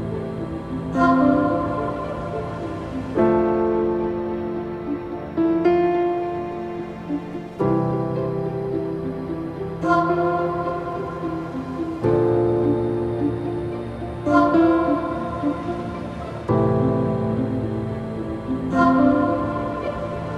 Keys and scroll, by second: 3.0-4.3 typing, 6.9 typing, 7.1 Return, 13.1 typing, 13.4 Return, 15.8 0, 16.0 Return, 18.0 alt+].